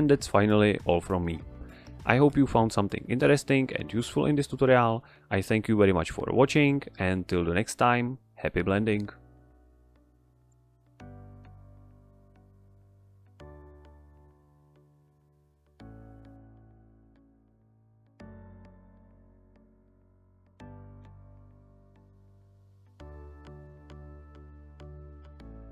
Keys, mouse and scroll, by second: 3.0 click, 7.0 click, 12.2 ctrl+Up.